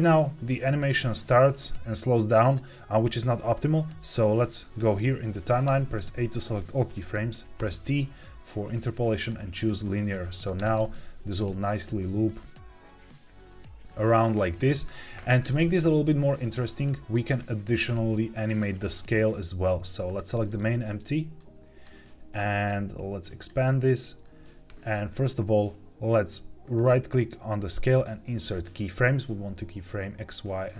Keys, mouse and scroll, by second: 5.6 a, 7.5 t, 10.2 click, 10.5 space, 15.3 space, 15.7-17.0 drag, 18.4 click, 20.0 click, 21.3 click, 22.5 click, 23.3 click, 25.8 ctrl+z, 26.6-29.6 right drag.